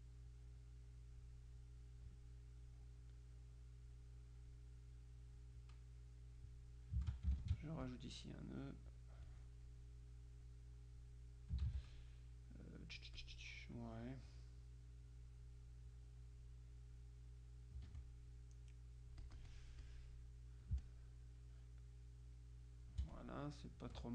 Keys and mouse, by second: 0.4-1.7 drag, 2.7-4.4 drag, 4.6 click, 7.5-8.6 ctrl+alt+drag, 9.4 click, 10.6-11.6 drag, 11.8 ctrl+z, 12.1-13.8 ctrl+drag, 14.4-15.8 drag, 16.0-17.0 drag, 18.0 Escape, 18.0 click, 19.3-20.5 drag, 20.8 space, 20.9-23.8 drag.